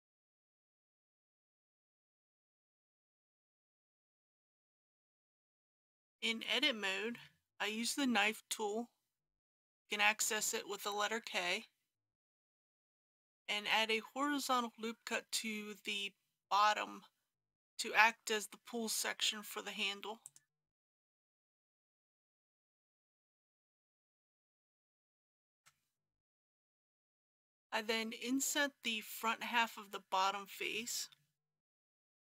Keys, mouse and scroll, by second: 0.0-1.6 typing, 1.3 click, 2.7 click, 3.0 KP_3, 3.1 s, 3.3 y, 4.8 click, 5.1 g, 5.2 y, 5.6 Tab, 9.2 k, 20.2 click, 25.6 Return, 27.0 click, 29.0-29.8 scroll up 1, 31.6 i.